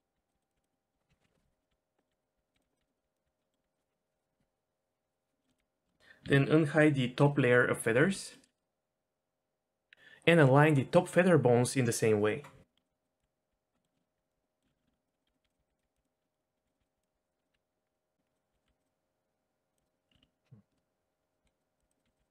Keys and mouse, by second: 0.0-0.6 typing, 0.7 middle click, 1.7-3.2 typing, 3.4 click, 5.7 g, 6.0 Tab, 7.8 alt+h, 8.3 click, 12.7 Tab, 12.9 g, 13.9 shift+middle click, 14.3-18.6 typing, 14.6 middle click, 14.8 ctrl+z, 14.9 ctrl+z, 16.2 middle click, 16.4 click, 16.7 click, 17.4 click, 18.8 click, 19.7 click, 19.8 g, 20.1 ctrl+z, 20.1 ctrl+z, 20.2 ctrl+z, 20.7 shift+middle click, 21.4-22.3 typing.